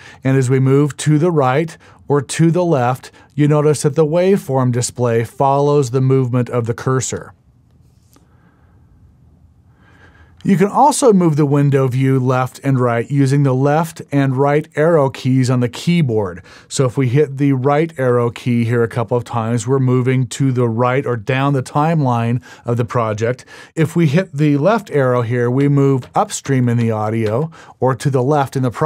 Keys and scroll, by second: 17.3 Right, 17.8 Right, 18.2 Right, 18.7 Right, 19.1 Right, 19.5 Right, 25.3 Left, 25.7 Left, 26.1 Left, 26.5 Left, 26.9 Left, 27.4 Left.